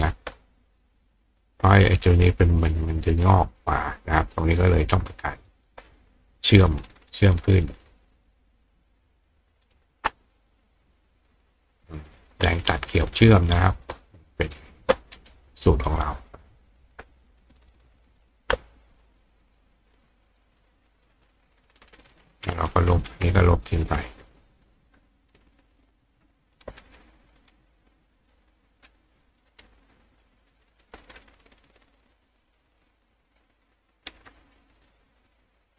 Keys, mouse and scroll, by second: 1.3 click, 1.9 click, 2.6 click, 5.5 shift+click, 6.5 shift+click, 7.6 shift+click, 8.6 shift+click, 9.6 shift+click, 11.6 click, 12.1 click, 13.4 click, 14.4 right click, 15.2 right click, 16.3 click, 17.5 click, 20.5 click, 22.0 click, 23.5 click, 24.5 click, 25.8 click, 26.4 click, 27.3 click, 28.4 click, 29.4 click, 30.4 click, 31.6 click, 33.6 click, 34.8 click.